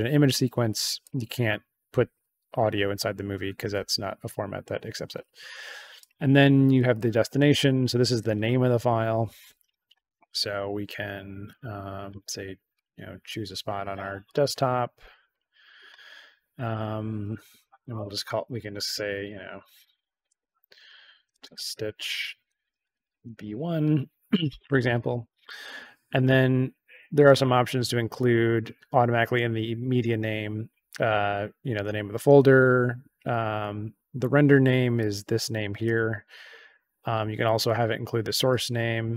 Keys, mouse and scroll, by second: 1.0 click, 5.9 click, 6.7 click, 7.6 click, 8.1 click, 11.4 click, 12.7 click, 14.2 click, 14.4 click, 15.3 click, 16.6 click, 17.9-23.9 typing, 34.9 click.